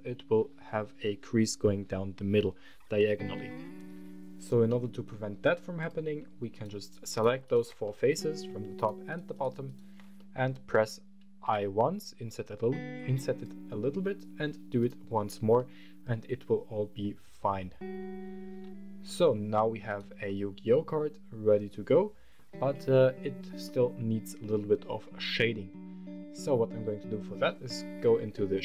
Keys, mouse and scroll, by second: 1.5-2.6 scroll down 1, 2.8-4.1 scroll down 1, 4.5 Tab, 5.6 click, 6.3 right click, 6.9 shift+click, 7.2 shift+right click, 7.6 middle click, 8.5 shift+click, 8.5 shift+right click, 8.8 shift+click, 8.8 shift+right click, 9.1 shift+click, 9.1 shift+right click, 9.4 shift+click, 9.4 shift+right click, 9.9 middle click, 11.2 i, 13.1 click, 13.7 i, 14.6 click, 14.9 Tab, 15.3-18.8 middle drag, 19.0 scroll up 1, 19.6 right click, 20.0-22.1 middle drag, 22.7 scroll down 2, 23.4-25.1 middle drag.